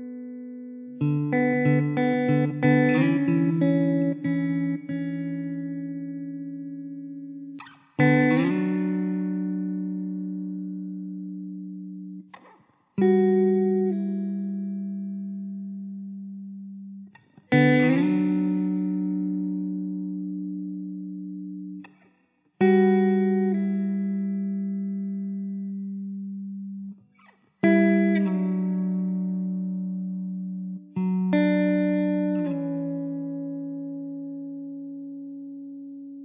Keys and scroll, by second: 0.6 alt+z, 1.2 Tab, 4.2 Tab, 4.7 2, 7.5 3, 8.8 2, 11.7 alt+z, 12.7 3, 13.4 1, 16.1 alt+z, 17.0 2, 22.2 alt+z, 22.6 Tab, 23.0 `, 24.9 z, 29.2 z, 30.9 alt+z, 33.4 ctrl+s, 33.8 shift+a.